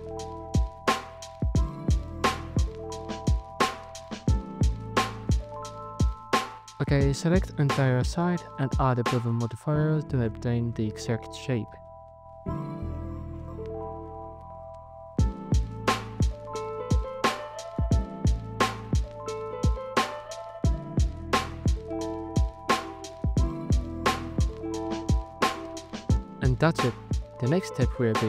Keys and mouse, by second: 1.3 middle click, 3.3 Tab, 4.3 alt+right click, 6.7 alt+shift+right click, 9.8 shift+right click, 10.4 shift+right click, 10.9 shift+right drag, 17.4 ctrl+b, 19.8 Tab, 22.1 KP_Divide, 23.4 z, 27.4 z.